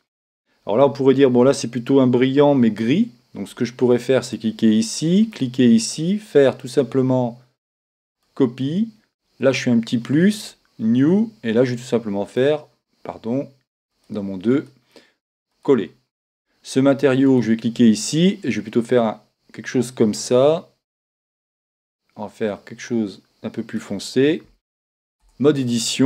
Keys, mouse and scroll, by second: 4.2-12.2 drag, 12.3-14.2 drag, 14.5-19.2 drag, 25.2 Tab.